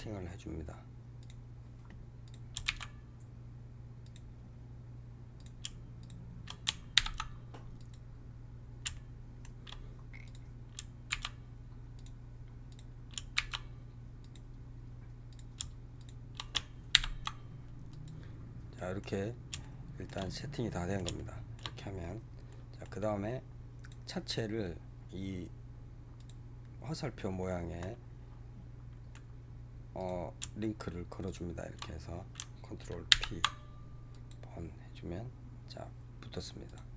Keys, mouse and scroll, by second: 2.2 click, 2.5 shift+s, 5.3 click, 5.9 shift+click, 6.8 ctrl+p, 8.5 scroll down 2, 8.8-10.2 shift+middle drag, 10.2 click, 11.0 shift+s, 12.6 click, 13.2 shift+s, 15.2 click, 15.9 shift+click, 16.8 ctrl+p, 18.6-19.1 middle drag, 19.1 scroll down 2, 19.5-23.1 shift+middle drag, 23.1-23.7 scroll up 1, 23.7 click, 26.1 click, 27.1-29.9 middle drag, 29.9 click, 31.1 shift+click, 33.0 ctrl+p, 36.6 click.